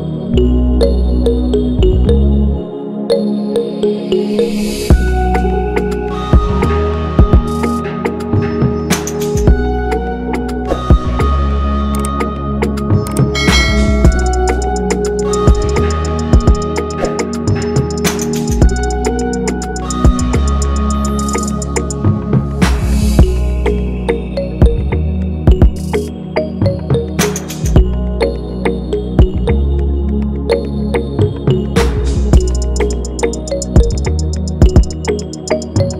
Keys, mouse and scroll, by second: 0.5 shift+click, 6.9 double click, 9.0 shift+click, 9.8 shift+click, 35.5 ctrl+=, 35.6 ctrl+=.